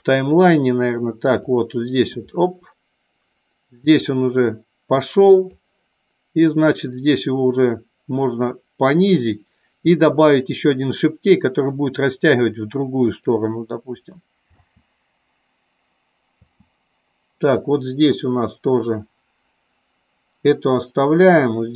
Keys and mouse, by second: 1.6 click, 4.2-5.7 drag, 6.7 click, 18.3-21.7 drag.